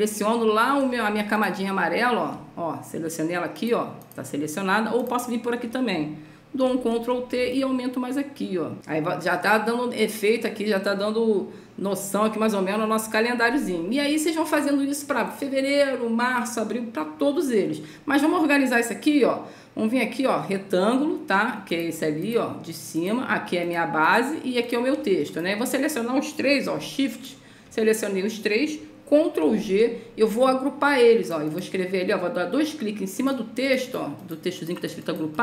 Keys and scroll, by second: 6.9 ctrl+t, 29.9 ctrl+g.